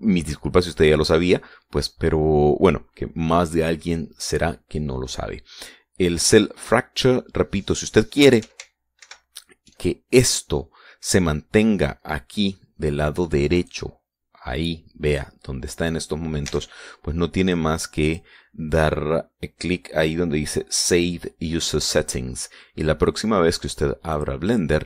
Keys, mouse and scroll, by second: 9.9 ctrl+alt+u, 14.5 click, 17.4 alt+Tab, 18.4 click.